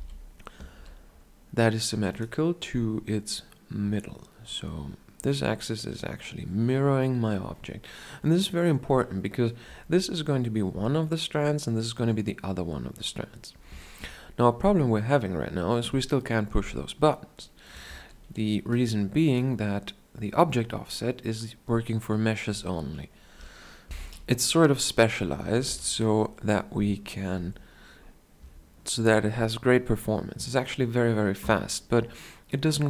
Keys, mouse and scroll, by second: 0.8 r, 3.5-12.7 right drag, 17.9-19.5 drag, 17.9 shift+a, 25.7 x, 27.4-29.5 middle drag, 27.4 shift+c.